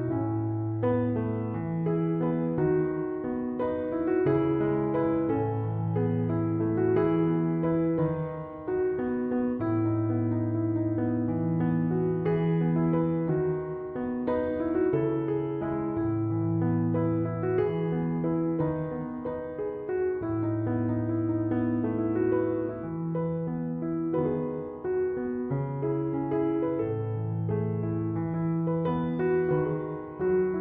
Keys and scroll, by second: 5.2 Escape, 21.1-22.7 typing, 27.8-28.8 typing.